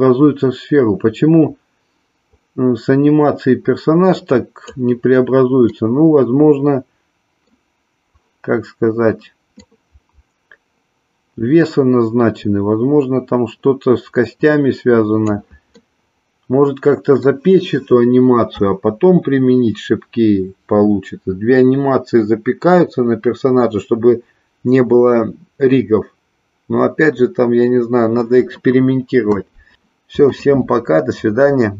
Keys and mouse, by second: 5.8-7.6 middle drag, 9.6-15.3 drag, 15.7-17.3 middle drag.